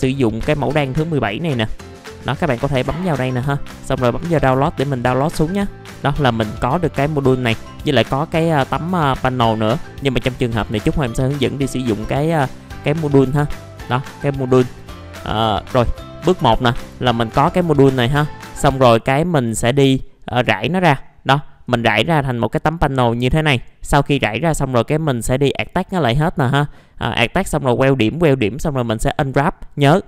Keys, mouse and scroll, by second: 1.5 click, 13.4 middle click, 15.1 scroll down 1, 15.3 click, 15.7-16.0 scroll up 1, 16.0 click, 16.6 middle click, 17.0 alt+middle click, 18.9 click, 20.8 middle click, 21.0-21.6 scroll down 1, 21.6-23.1 drag, 24.2 middle click, 24.6-25.1 scroll up 1, 25.1 click, 26.8-28.4 scroll up 1, 28.4-30.0 scroll down 1.